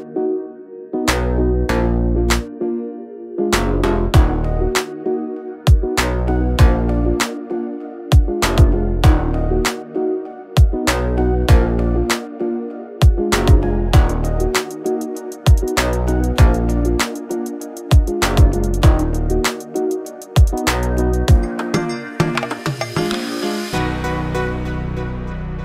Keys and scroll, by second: 0.3 Delete, 1.0 p, 2.2 space, 5.5 r, 10.8 space, 11.7 Delete, 12.9-14.9 typing, 20.9 r, 22.4 space, 23.6 m, 24.1 Up, 24.8-25.6 typing, 25.1 Return.